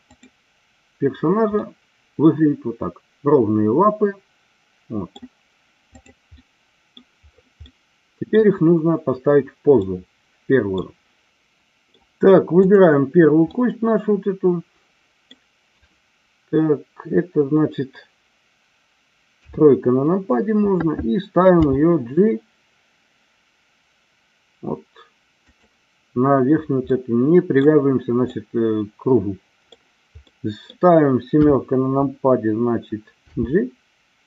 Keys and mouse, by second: 0.1 click, 1.6-5.2 middle drag, 5.9 click, 6.3-6.9 middle drag, 7.6-8.4 middle drag, 9.9-10.7 middle drag, 11.3-11.9 middle drag, 12.6 click, 13.5-15.4 middle drag, 19.3 KP_3, 21.5 g, 26.8-27.6 middle drag, 28.3-29.8 middle drag, 30.3 middle click, 31.3 KP_7, 33.1 g.